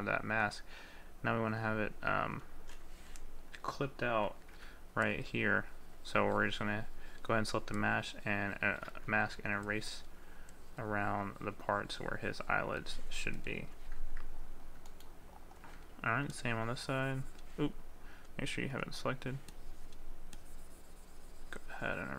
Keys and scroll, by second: 9.4 ctrl+z.